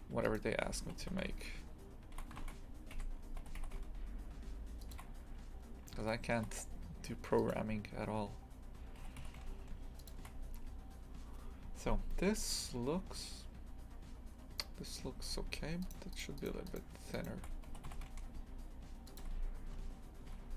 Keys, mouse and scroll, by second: 0.1 1, 0.3 right click, 0.9 g, 3.5 g, 5.7-6.1 scroll up 1, 6.1-7.4 shift+middle drag, 7.4-9.1 right drag, 9.1 g, 12.6-15.2 scroll down 1, 15.2 2, 15.9 right click, 16.2 shift+right click, 16.4 shift+right click, 16.7 shift+right click, 17.2 shift+right click, 17.7 g, 19.8 Tab, 20.2 Tab, 20.4-20.5 scroll up 7.